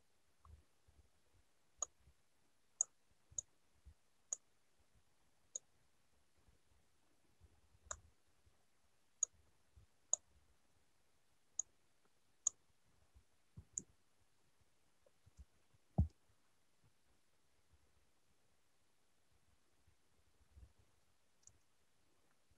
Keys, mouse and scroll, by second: 13.5 ctrl+z, 14.3 ctrl+z, 15.4 alt+Tab, 16.0 ctrl+z, 20.8 alt+Tab, 21.4 alt+Tab.